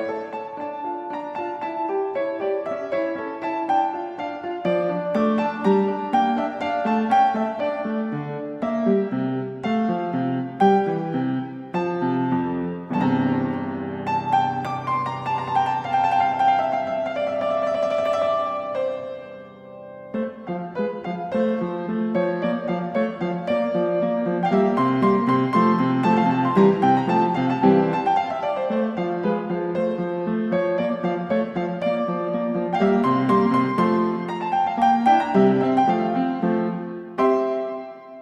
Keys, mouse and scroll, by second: 0.1 typing, 3.4 o, 11.7-12.5 drag, 12.7 click, 17.3-18.3 typing, 19.4 m, 22.1-23.3 typing, 22.2 Return, 25.9-27.7 typing, 29.0-30.5 typing, 32.0 space, 32.3 m, 33.9-34.6 typing, 35.8 o.